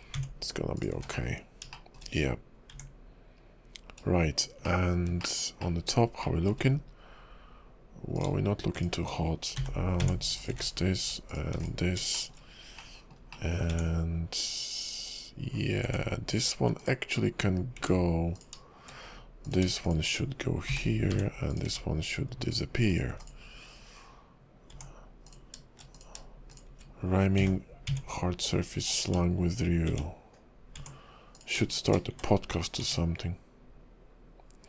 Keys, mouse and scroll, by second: 0.1 Tab, 0.8 click, 0.9 x, 1.7 shift+middle click, 2.2-2.7 scroll up 2, 2.7 Tab, 4.6 shift+middle click, 5.2 shift+middle click, 5.6 shift+middle click, 6.2 shift+middle click, 6.7-7.8 scroll up 2, 8.1 click, 8.8 shift+click, 9.7 j, 10.0 Tab, 10.4 click, 10.5 x, 11.3 click, 11.5 x, 12.1 shift+middle click, 12.8 middle click, 13.3 middle click, 13.4 shift+middle click, 13.7 Tab, 15.8 Tab, 16.4 click, 16.6 x, 17.3-17.8 scroll down 1, 17.8 Tab, 18.3 click, 19.4 click, 19.8 shift+click, 20.0 shift+click, 20.8 j, 21.1 Tab, 21.5 click, 21.7 x, 22.5 click, 22.9 click, 23.1 x, 24.7 Tab, 25.3 click, 25.9 click, 26.5 shift+click, 26.8 shift+click, 27.5 j, 27.9 Tab, 28.9 click, 29.9 Tab, 30.7 Tab, 31.3 click, 31.7 shift+click, 32.4 1, 32.8 Tab.